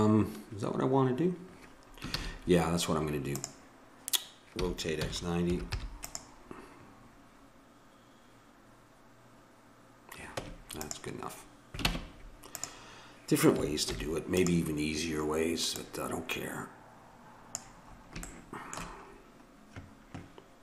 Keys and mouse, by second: 2.1 shift+a, 4.6 r, 10.3 Tab, 11.9 ctrl+Tab, 13.9 alt+m, 15.7-17.4 drag.